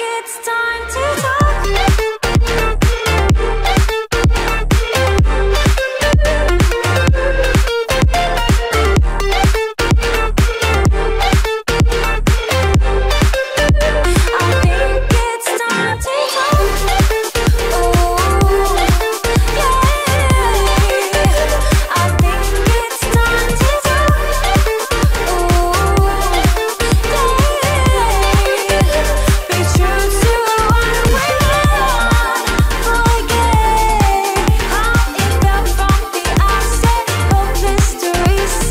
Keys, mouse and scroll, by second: 3.2 ctrl+z, 4.2-5.7 drag, 8.1 click, 10.3-14.2 drag, 14.2 i, 15.3 click, 15.8 v, 16.3 click, 21.6 right click, 22.3-25.7 drag, 25.7 i, 26.1 click, 27.5-28.3 alt+scroll up 1, 28.6-29.2 scroll up 1, 29.2 v, 29.5 click, 30.7-35.4 alt+drag, 35.4 ctrl+g, 36.8-38.7 alt+drag.